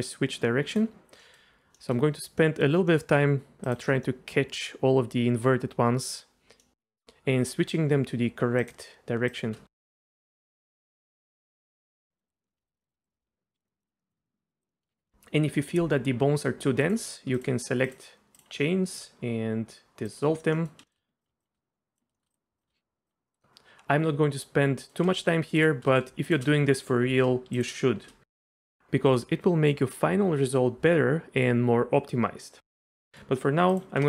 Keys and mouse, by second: 1.2 middle click, 1.7 middle drag, 2.4 middle drag, 2.9 middle click, 4.0-5.4 middle drag, 6.0 middle click, 6.6-6.9 middle drag, 7.0 middle click, 7.4-7.9 middle drag, 8.2 middle click, 8.6 middle click, 9.8 middle click, 11.5 shift+click, 12.3 click, 12.3 middle click, 12.4 shift+middle click, 12.6 shift+middle drag, 12.7 middle click, 13.1 middle click, 13.3 middle click, 13.6 middle click, 13.8 middle click, 14.0 middle click, 14.2 middle click, 14.4 middle click, 14.7 middle click, 14.8 shift+middle click, 15.1 shift+middle click, 16.8 click, 18.3 shift+click, 20.1 click, 20.5 middle click, 20.9 shift+middle drag, 22.1 shift+middle drag, 23.3 middle click, 24.4-24.9 middle drag, 25.6 shift+click, 27.5 shift+click, 29.2 middle click, 33.1 middle click, 33.7 click.